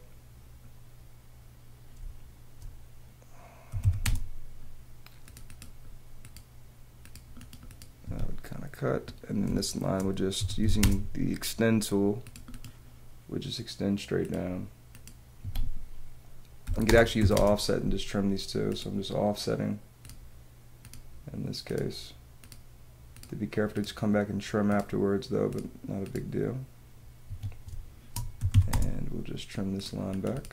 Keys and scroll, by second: 2.0 space, 3.7 t, 4.9 space, 8.0 Escape, 9.4 space, 10.5 e, 10.9 space, 15.4 Escape, 16.6 o, 16.9 space, 17.1 t, 27.2 Escape, 27.7 space, 28.3 t, 29.5 space.